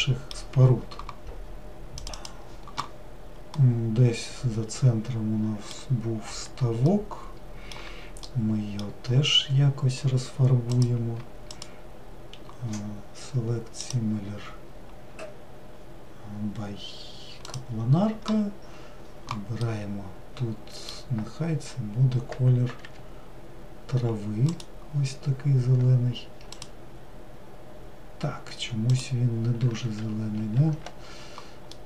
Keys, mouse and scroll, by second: 9.0 scroll up 1, 9.8 scroll up 1, 10.7 click, 22.8 g, 26.5 click, 28.9 click, 29.7 ctrl+z, 30.2 ctrl+z.